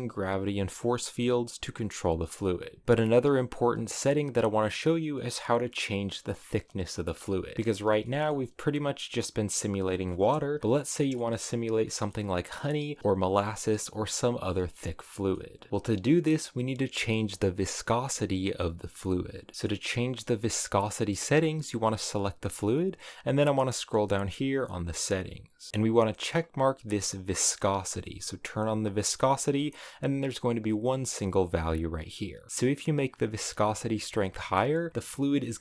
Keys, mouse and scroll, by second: 2.4 click, 2.6 space, 4.1-7.0 drag, 7.0 space, 7.1-10.6 middle drag, 10.6 space, 10.8-15.6 middle drag, 15.6 space, 15.7-17.6 shift+middle drag, 19.5-21.3 middle drag, 21.3 right click, 23.2-25.8 drag, 26.1-27.6 scroll down 3, 27.6 click, 28.4-31.4 drag.